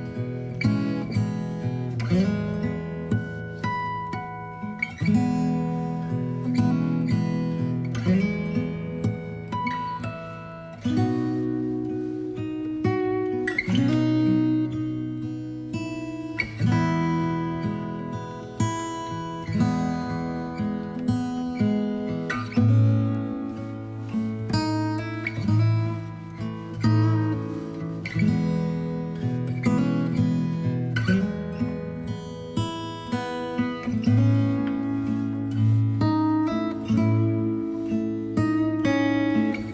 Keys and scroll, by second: 1.6 Left, 2.0 Left, 2.7 space, 25.7 ctrl+j, 27.0 ctrl+j.